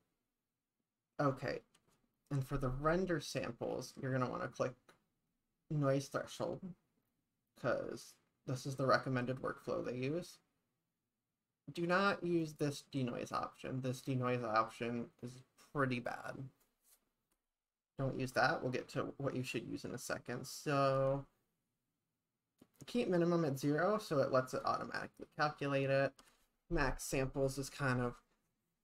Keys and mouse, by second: 12.5 click, 14.1 click, 16.1 click, 24.5-28.8 drag.